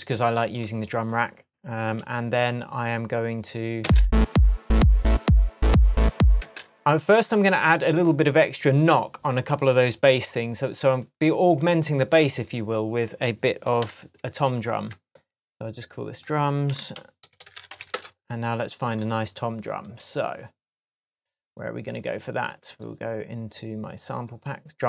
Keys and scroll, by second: 3.8 space, 6.3 space, 13.8 shift+super+m, 14.9 shift+super+Tab, 16.6 super+r, 17.2-18.0 typing.